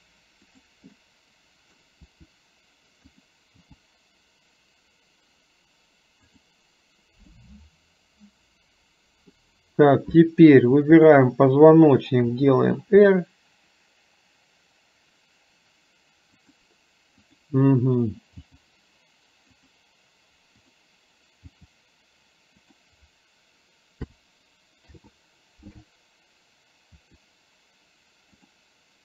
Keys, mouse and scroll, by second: 1.1 middle click, 7.3-9.5 middle drag, 11.2 shift+click, 17.3 click, 20.6 click.